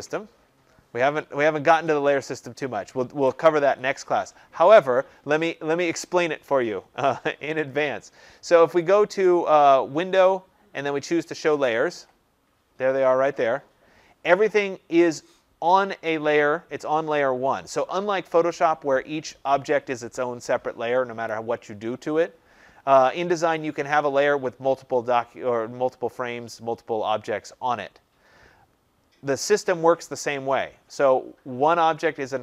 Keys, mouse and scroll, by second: 8.8 click, 11.3 click, 23.5 click.